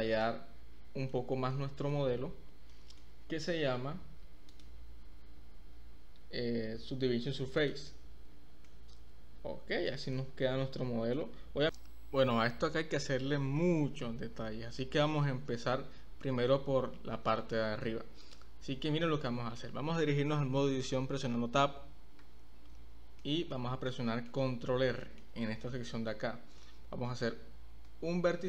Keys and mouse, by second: 0.3-1.1 middle drag, 1.5-1.9 middle drag, 2.7-3.0 middle drag, 4.5-8.0 drag, 8.7-9.9 middle drag, 10.2-11.1 middle drag, 14.8-15.2 middle drag, 16.2-16.5 middle drag, 17.5-17.8 middle drag, 18.2 click, 19.2-19.6 middle drag, 22.2 Tab, 23.2 middle click, 23.9 middle click, 25.0 middle click, 27.8 ctrl+r.